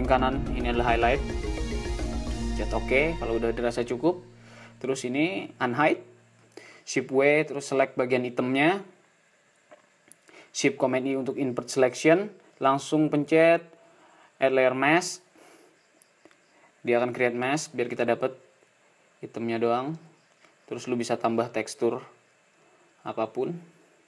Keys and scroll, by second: 10.7 shift+super+i, 19.3 super+space, 22.7 d, 23.6 c.